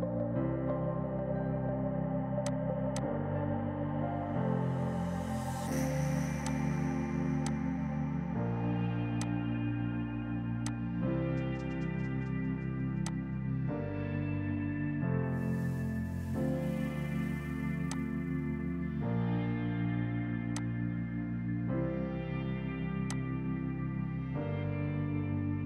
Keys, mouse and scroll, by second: 1.6 click, 2.1 space, 2.4 click, 2.9 F2, 3.0 click, 3.2 right click, 6.5 click, 7.4 F2, 7.4 click, 7.6 right click, 9.2 click, 10.6 alt+click, 11.2 r, 12.7 F3, 13.0 F2, 13.1 click, 13.2 right click, 17.8 F2, 17.9 click, 18.1 right click, 20.6 click.